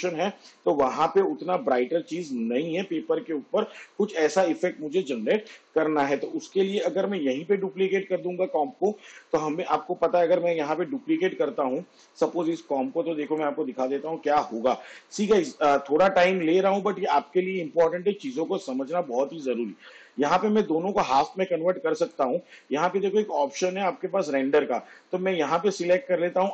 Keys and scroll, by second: 5.4 ctrl+z, 11.1 ctrl+d, 14.2 ctrl+d.